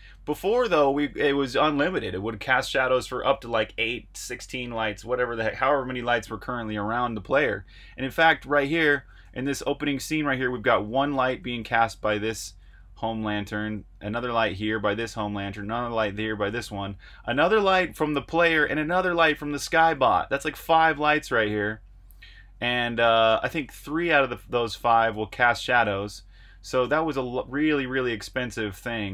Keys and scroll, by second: 0.8 super+r, 1.0 Escape, 1.1-2.0 typing, 8.4-9.3 typing, 10.3-14.7 typing, 16.9 typing, 23.5-29.1 typing.